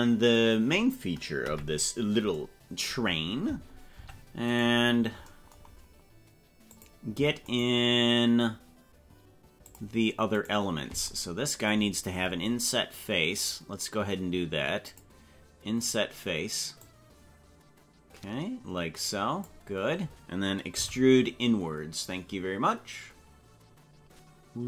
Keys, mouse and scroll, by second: 1.4 KP_Decimal, 4.1 Tab, 4.4 right click, 6.7 click, 7.4 right click, 9.8 click, 10.3 right click, 14.9 click, 16.8-19.6 drag, 20.8 e.